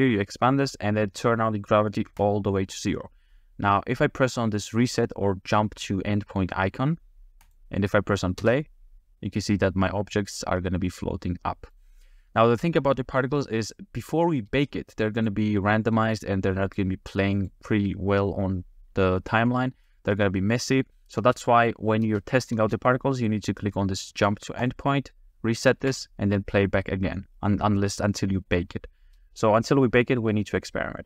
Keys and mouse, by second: 2.3 click, 7.4 click, 8.4 space, 9.6-11.8 middle drag, 15.2 click, 15.8 middle click, 16.7 click, 17.3 click, 19.5-19.9 middle drag, 21.2 space, 22.0 space, 22.6 space, 25.8 space, 27.5-30.4 middle drag.